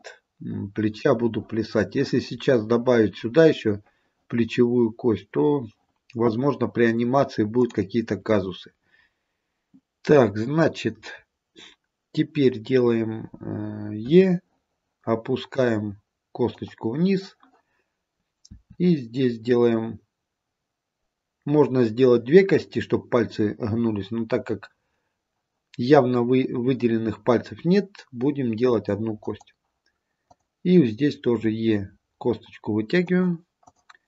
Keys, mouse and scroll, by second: 7.6 click, 14.2 e, 18.6 e, 30.4 click, 31.3 e, 33.8 click.